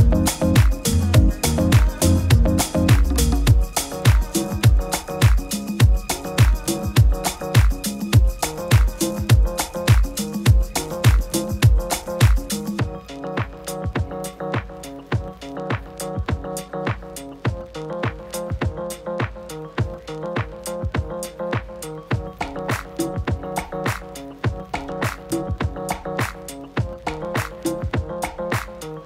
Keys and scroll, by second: 1.7 super+a, 3.3 shift+super+c, 4.9 super+v.